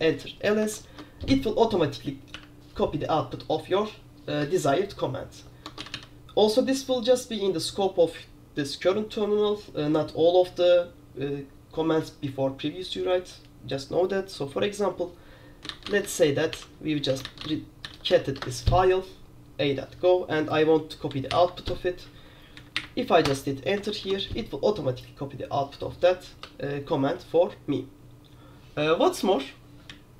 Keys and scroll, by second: 0.9 ctrl+v, 2.5 =, 4.5-6.0 typing, 5.9 Escape, 15.5-18.7 typing, 21.4 alt+o, 22.6 Down, 22.8 Up, 23.3 Return, 24.1 ctrl+v, 26.5-29.5 BackSpace.